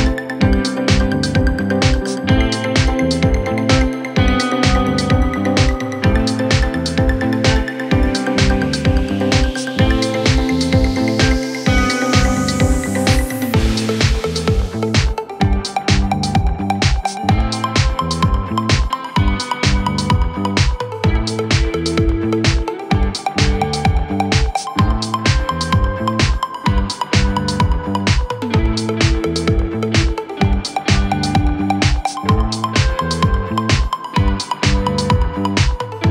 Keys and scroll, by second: 2.4 4, 5.2 3, 5.7 Delete, 22.1 F1, 32.7 Delete, 34.0 ctrl+z.